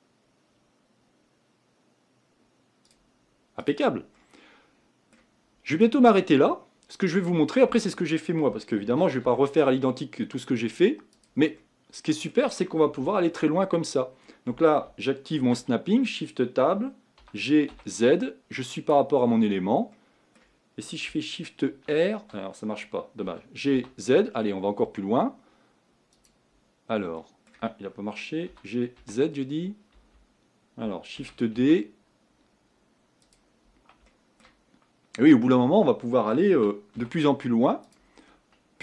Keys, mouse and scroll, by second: 4.2-7.3 middle drag, 7.3 click, 8.9 shift+d, 11.6-13.6 middle drag, 13.6-14.5 scroll up 3, 14.5-15.4 scroll up 1, 15.4 shift+Tab, 17.2 g, 19.2-19.9 scroll down 4, 19.9-21.7 middle drag, 21.7 shift+r, 23.3 g, 27.2-28.5 middle drag, 28.5 g, 31.2 shift+d, 34.1 shift+middle click, 34.7-36.6 scroll up 3, 36.6 g, 38.2-38.8 scroll down 3.